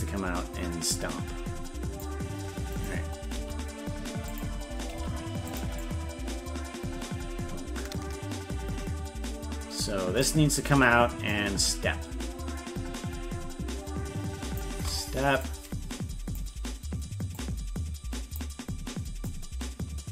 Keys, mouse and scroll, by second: 2.7 right click, 3.3 g, 5.8-10.2 drag, 11.2-14.5 shift+drag, 15.4 click, 17.3-18.3 drag, 19.2 click.